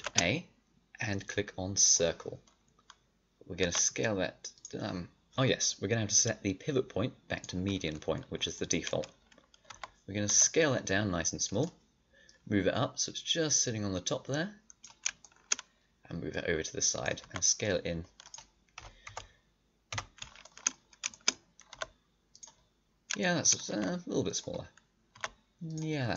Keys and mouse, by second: 3.5 s, 9.6 s, 10.2 s, 16.2-18.2 drag, 17.1 s, 18.7 KP_7, 19.0 KP_5, 19.9 KP_5, 21.6 s, 23.6 s, 25.1 s.